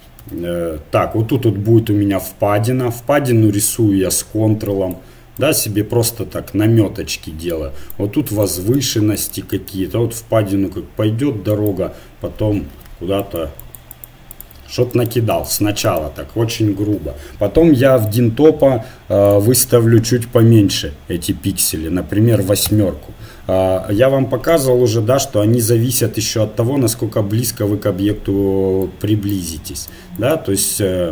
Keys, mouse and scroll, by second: 0.3 ctrl+z, 3.6-7.4 drag, 7.5-11.4 drag, 11.5-17.7 drag, 12.8 ctrl+z, 18.1-21.5 drag, 24.5 z, 26.6 z, 27.9 middle click, 28.8-31.1 drag.